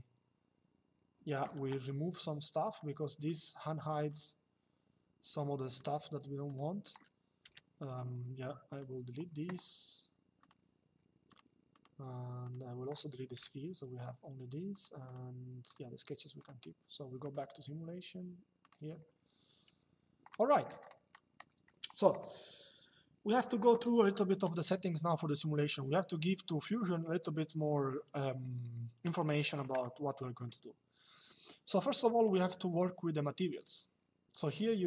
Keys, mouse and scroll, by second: 1.8 click, 3.8 click, 5.5 click, 7.1 Delete, 8.4 click, 10.1 click, 13.0 Delete, 14.4 click, 18.3 click, 20.2 middle click, 24.4 shift+middle click, 29.0 middle click, 32.0 click.